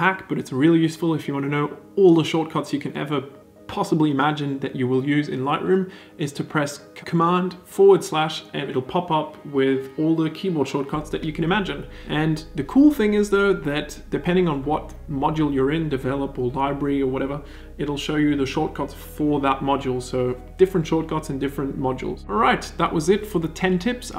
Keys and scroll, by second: 7.3 super+/, 9.6 super+/, 13.5 e, 16.0 super+/.